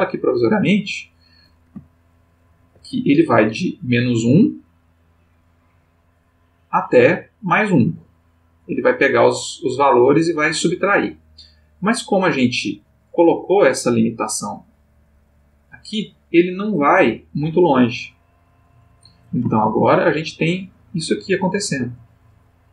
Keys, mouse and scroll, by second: 0.3 click, 1.9-2.8 ctrl+middle drag, 5.2 click, 6.4-12.5 drag, 15.5 click, 16.8 click, 18.8 click, 19.5-20.2 ctrl+middle drag, 20.9-22.7 drag.